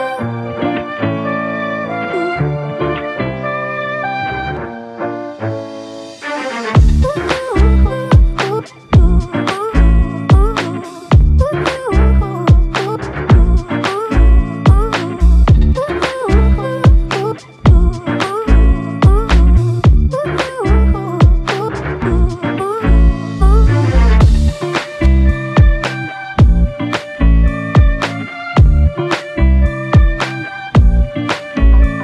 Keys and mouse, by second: 4.3 f, 7.9 double click, 10.0 typing, 11.1 alt+shift+click, 12.6 ctrl+alt+click, 13.2 double click, 16.0 double click, 18.1 alt+click, 19.4 alt+p, 21.2 alt+m, 22.5 shift+click, 24.3 ctrl+alt+click, 26.6 alt+click, 29.9 double click.